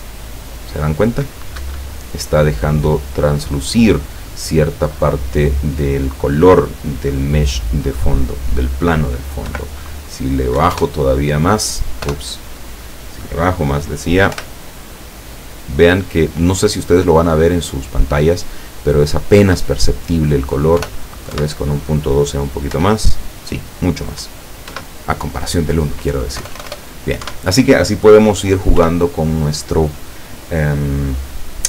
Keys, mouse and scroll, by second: 1.6 Escape, 2.9 click, 9.5 Delete, 10.6 KP_1, 10.7 KP_Enter, 12.1 BackSpace, 14.4 p, 19.4 Escape, 20.9 BackSpace, 21.4 KP_2, 22.8 p, 24.8 Escape, 26.4 BackSpace, 27.5 KP_1, 28.8 End.